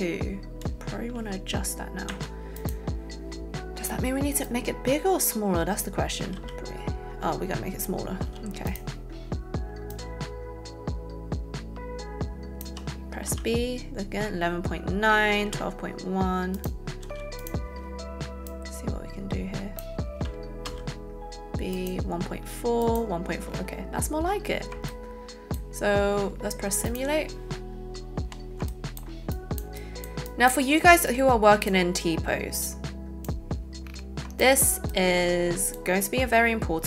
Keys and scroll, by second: 2.2 a, 6.4 b, 8.3 a, 13.2 shift+b, 20.8 b.